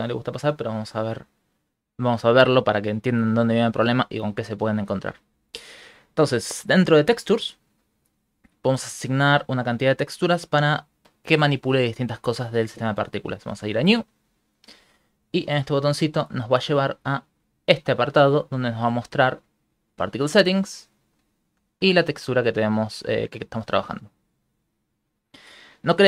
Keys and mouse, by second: 2.1 shift+middle click, 3.0 ctrl+middle click, 3.4 shift+middle click, 3.9 ctrl+middle click, 4.5 shift+middle click, 6.7 click, 7.5 click, 7.9 middle click, 9.4 click, 13.7 click, 16.4 click, 18.5 middle click, 19.4 click, 21.5 click, 22.2 click, 25.5 middle click.